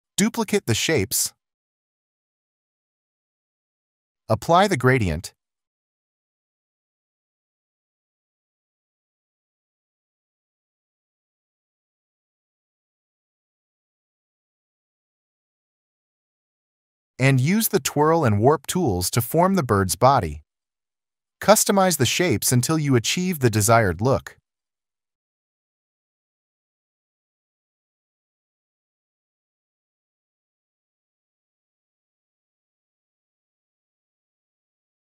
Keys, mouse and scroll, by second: 0.2 alt+click, 3.6 ctrl+0, 6.4-7.0 alt+scroll, 20.7 ctrl+z, 23.5 ctrl+0, 25.4 ctrl+z, 25.8 alt+click, 26.3 alt+click, 27.8 alt+click, 28.2 ctrl+z, 28.2 alt+scroll, 28.6 alt+click, 29.0 alt+click, 29.1 alt+click, 29.5 alt+click, 30.5 alt+click, 31.0 alt+click, 32.2 alt+click, 32.5 alt+click, 32.7-33.0 alt+scroll, 33.9 alt+scroll, 34.4 alt+click, 34.5 ctrl+z, 34.6 alt+shift+click.